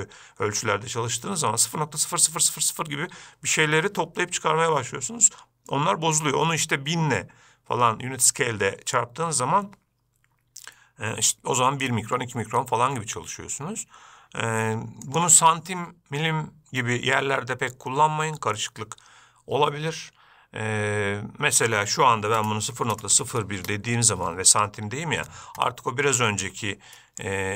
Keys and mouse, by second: 15.4-24.5 drag, 26.5 shift+middle drag.